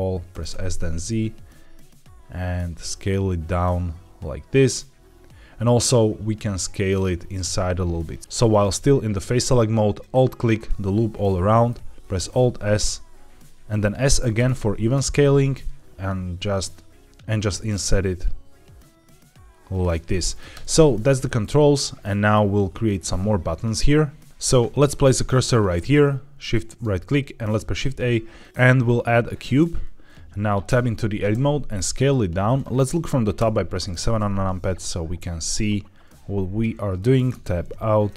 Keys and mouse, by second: 0.2 s, 0.4 z, 7.2 click, 9.9 alt+click, 11.3 middle click, 12.0 alt+s, 14.2 s, 19.6 shift+click, 19.9 middle click, 20.4 Tab, 21.1 shift+middle drag, 21.6-22.2 middle drag, 26.3 shift+right click, 27.5 shift+a, 30.6 Tab, 31.2 s, 32.3 click, 33.3 KP_7, 35.1 s, 36.8 click, 37.2 Tab, 38.0 g.